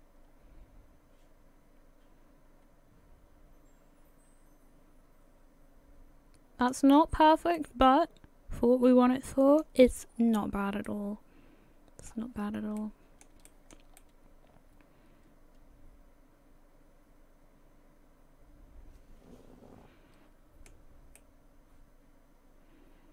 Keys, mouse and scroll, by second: 0.1 middle click, 6.9-7.6 scroll up 3, 7.6 middle click, 10.1-10.6 scroll down 6, 10.9 middle click, 12.4-12.8 scroll up 3, 12.8 middle click, 13.5 shift+middle click, 14.0 middle click, 21.2 middle click.